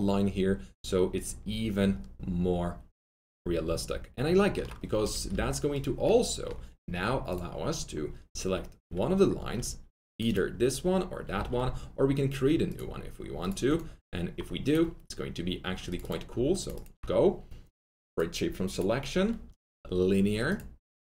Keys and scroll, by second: 5.0 alt+F3, 5.3 alt+F4, 11.3 alt+1.